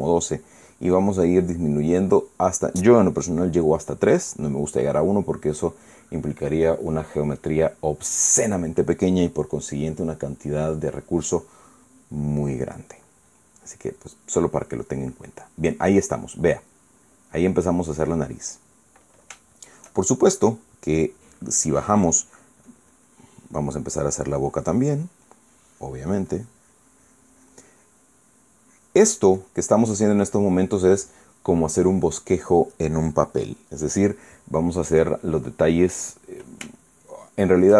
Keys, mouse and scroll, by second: 13.7-19.7 middle drag, 20.1 shift+middle click, 23.4-24.2 drag, 24.6 click, 24.9-26.9 drag, 27.0-28.4 drag, 28.5-30.0 drag, 30.1-31.4 drag, 37.5-37.7 shift+middle drag.